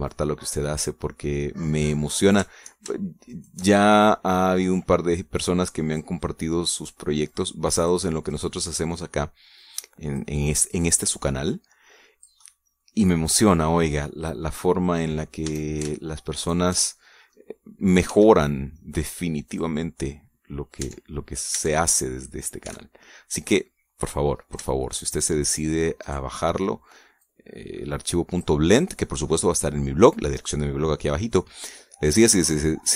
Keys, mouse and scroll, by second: 0.2 shift+right click, 1.0-3.4 drag, 4.2 shift+right click, 6.1-7.7 drag, 7.7 right click, 8.2 click, 9.2 right click, 9.9-11.2 drag, 11.6 right click, 12.4 click, 13.3-15.0 middle drag, 15.1 scroll down 1, 15.5-16.5 middle drag, 16.3 a, 17.3 alt+shift+click, 17.8 alt+shift+middle click, 19.0 s, 20.4-21.8 drag, 21.7 Tab, 22.2 scroll down 1, 22.8 middle click, 23.5 a, 23.9-25.2 drag, 25.3 scroll up 1, 25.6 shift+click, 26.9 right click, 27.2 click, 28.1-31.0 drag, 29.5-31.0 right drag, 32.6-32.9 middle drag.